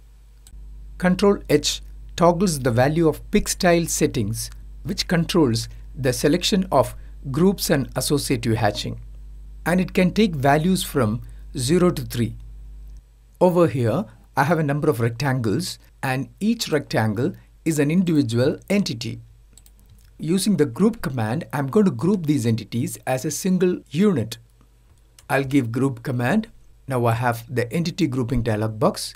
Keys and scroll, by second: 0.6 ctrl+h, 21.0 typing, 24.8 typing, 26.0 typing.